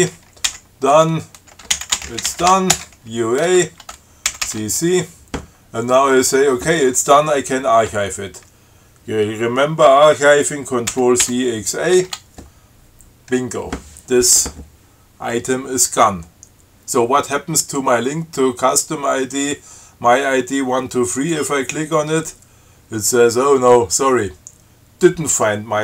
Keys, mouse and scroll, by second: 0.1 ctrl+t, 0.8-3.2 typing, 4.6 ctrl+c, 11.2 ctrl+c, 11.4 ctrl+x, 12.2 ctrl+a, 16.3-16.7 scroll up 2, 21.4 click.